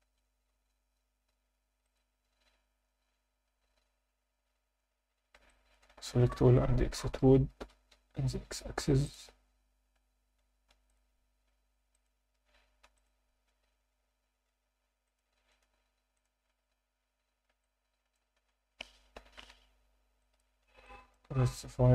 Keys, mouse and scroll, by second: 1.8 click, 5.1 Tab, 5.5 middle click, 5.9 a, 7.6 e, 7.9 x, 9.1 click, 9.3 a, 9.8-10.5 scroll up 1, 10.7 ctrl+r, 11.9 click, 12.8 ctrl+r, 15.1 click, 15.2 Tab, 15.5-16.7 right drag, 16.7-17.1 scroll up 2, 17.0 Tab, 17.6 alt+middle click, 18.3 a, 19.2 shift+n, 19.5 Tab, 20.2-20.6 alt+middle drag, 20.8 alt+shift+middle drag, 21.4-21.9 scroll up 2, 21.7 Tab.